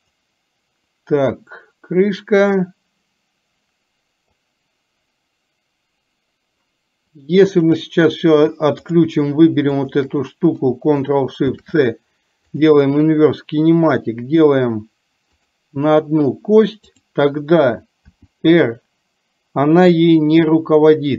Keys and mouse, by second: 0.0 click, 8.9 click, 10.0 shift+click, 11.5 ctrl+shift+c, 17.0 click, 18.3 r.